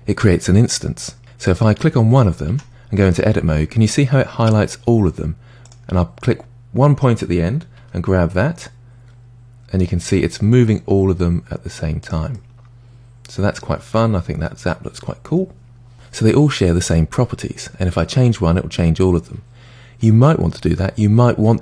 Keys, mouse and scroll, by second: 1.5 click, 2.5 Tab, 5.7 click, 7.8 g, 12.4-15.5 middle drag, 21.1-21.6 scroll down 5.